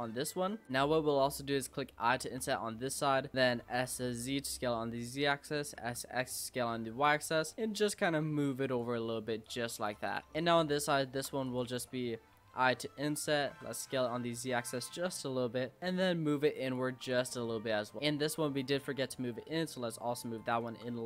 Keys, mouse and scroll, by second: 0.6 ctrl+z, 2.2 i, 3.6 s, 5.6 s, 7.8 click, 9.4 click, 10.1 click, 10.3 middle click, 10.4-11.0 scroll down 3, 11.0 shift+middle click, 11.5 click, 11.8-12.4 scroll up 2, 12.4 i, 13.5 s, 15.0 middle click, 15.6 e, 16.9 Tab, 17.1 click, 17.4 middle click, 18.0 Tab, 18.2 click, 18.6-19.0 scroll up 3, 19.0 e, 20.7 Tab, 20.9-21.0 scroll down 5.